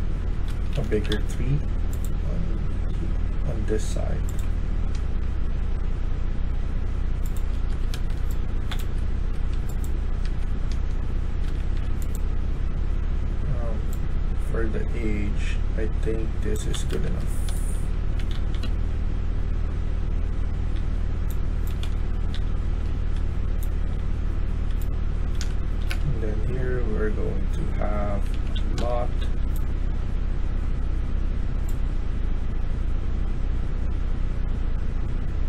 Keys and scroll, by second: 0.1-1.4 typing, 4.8-6.0 typing, 7.5 Escape, 7.8-8.6 d, 8.7 Escape, 9.2 Escape, 9.6-12.8 typing, 16.5-18.5 typing, 16.8 Escape, 20.6-25.7 typing, 28.0-29.1 typing.